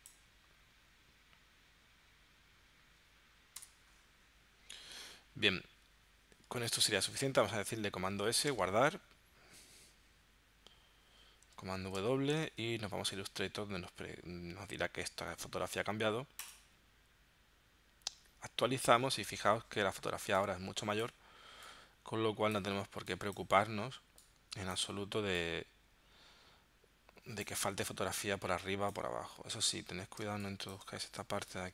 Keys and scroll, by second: 3.6 Return, 8.1 super+s, 11.9 super+w, 12.5 super+Tab, 30.3 space.